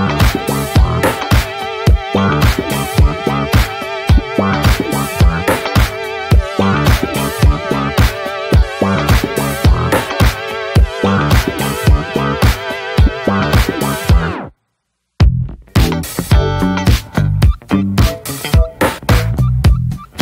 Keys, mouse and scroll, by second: 2.1 alt+middle click, 3.5-9.1 drag, 10.0 drag, 10.4 drag, 11.0-12.4 shift+middle drag, 12.4 click, 14.2-15.7 drag, 16.2 drag, 16.6-17.3 middle drag, 18.3 ctrl+a, 19.2-20.2 right drag.